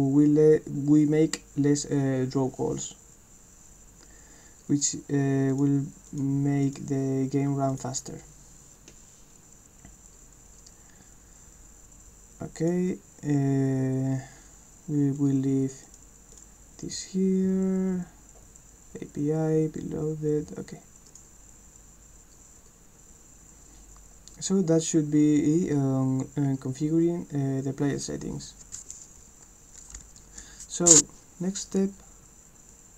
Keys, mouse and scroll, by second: 4.8 click, 5.5 click, 6.1 click, 6.7 click, 7.7 click, 12.6 click, 15.9 click, 16.3 click, 21.1 click, 32.7-32.9 drag.